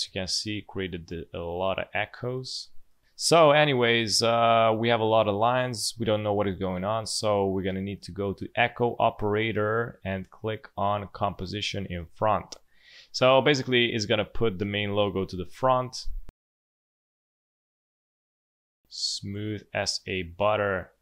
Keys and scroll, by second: 17.3 space.